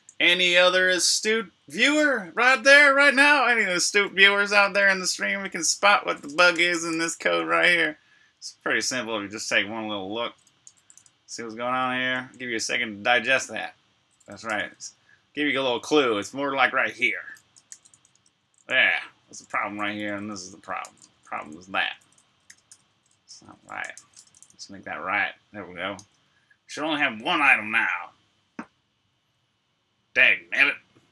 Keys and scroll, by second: 0.0-0.1 typing, 1.5-3.2 typing, 4.3-7.3 typing, 10.5 Escape, 10.7 k, 11.6 k, 11.9 j, 13.0 j, 14.2 shift+v, 14.6 k, 16.4-22.3 typing, 25.7-27.5 typing.